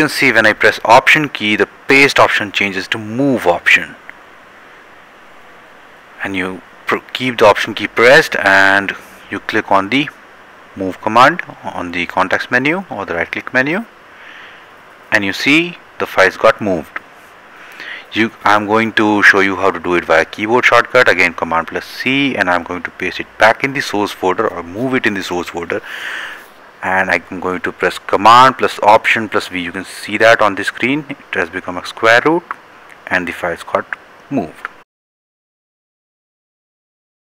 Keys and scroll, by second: 19.0 c, 29.8 alt+v.